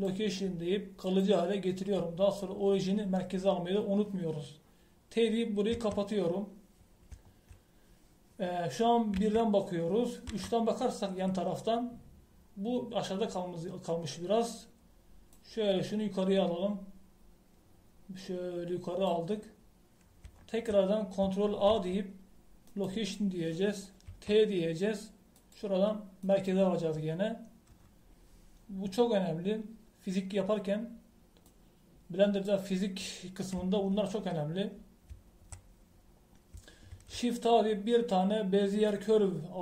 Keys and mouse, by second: 1.6-5.7 drag, 6.7 t, 10.1 KP_1, 11.3 KP_3, 16.3 click, 17.5 click, 20.5-22.7 middle drag, 22.7 ctrl+a, 25.1 t, 26.4-28.3 drag, 32.4 click, 32.9 click, 33.5-35.8 drag, 37.9 shift+a.